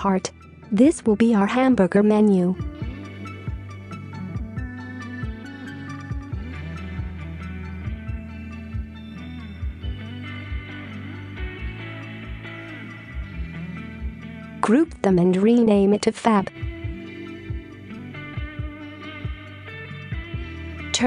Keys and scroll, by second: 0.4 Tab, 1.6 typing, 2.4 Return, 17.1 ctrl+g, 19.2 typing.